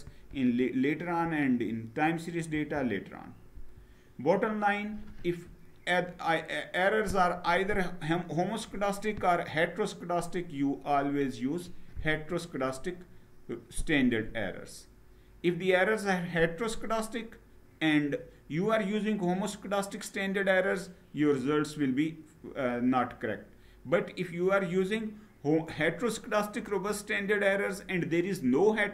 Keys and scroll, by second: 2.3 Down.